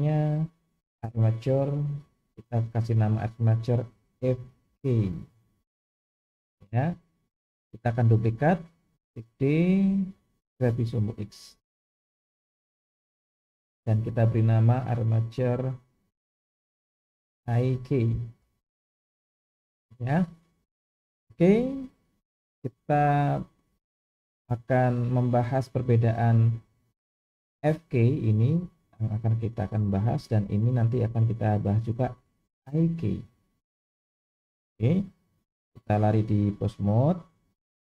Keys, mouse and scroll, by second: 1.3-5.8 drag, 8.1 click, 9.3 shift+d, 14.9-19.2 drag, 23.5 click, 32.9 click, 34.3 click, 35.7-36.8 drag.